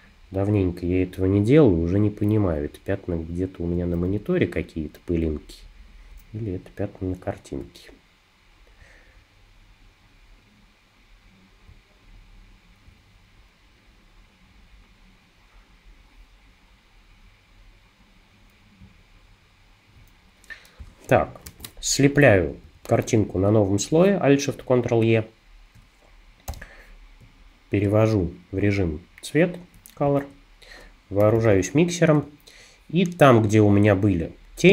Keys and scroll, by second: 21.5 alt+shift+super+e, 22.6 super+=, 22.9 super+=, 23.4 super+=, 24.9 space, 26.5 b, 30.1 shift+b, 31.2 [, 32.3 space.